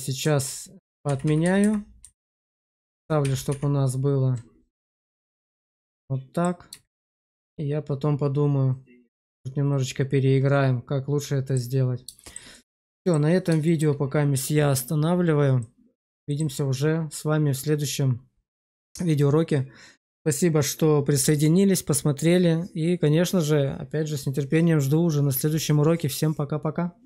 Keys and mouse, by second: 1.0 ctrl+z, 1.2 ctrl+z, 1.3 ctrl+z, 1.5 ctrl+z, 1.9 ctrl+z, 2.2 ctrl+z, 2.5 ctrl+z, 2.8 ctrl+z, 3.2 ctrl+z, 3.4 ctrl+z, 4.6 Tab, 5.3-6.3 middle drag, 6.8 shift+middle click, 7.4-11.4 middle drag, 12.1 shift+middle click, 12.4 middle click, 13.5 shift+middle click, 15.5 middle click, 16.2 shift+middle click.